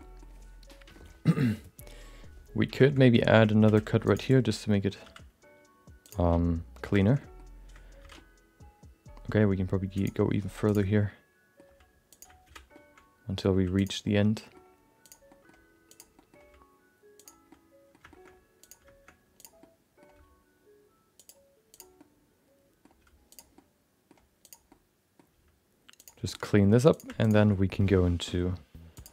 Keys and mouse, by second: 0.0 middle click, 0.6 middle click, 2.8 shift+middle click, 3.0 middle click, 3.6 ctrl+r, 4.6 middle click, 5.0 s, 6.4 middle click, 7.2 middle click, 8.0 alt+z, 8.2-9.4 middle drag, 9.9 click, 10.6 click, 10.9 middle click, 11.6 g, 12.4 alt+z, 12.8 middle click, 13.5 g, 14.1 middle click, 15.0 click, 15.3 middle click, 15.9 click, 16.1 middle click, 16.4 g, 17.6 middle click, 18.1 shift+middle click, 18.6 click, 19.4 click, 19.6 middle click, 20.1 g, 21.7 click, 22.1 middle click, 22.7 middle click, 23.0 g, 23.7 middle click, 24.4 click, 24.7 middle click, 25.3 g, 26.4 middle click, 26.9 click, 27.2 shift+click, 27.5 middle click, 27.9 g.